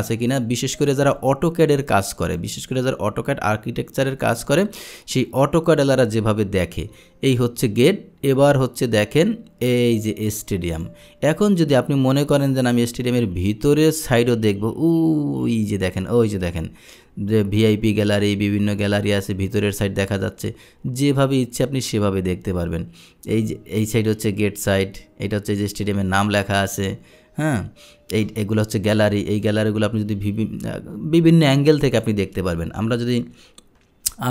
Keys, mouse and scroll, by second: 2.4-11.0 drag, 12.5-28.3 drag, 29.5-32.1 drag.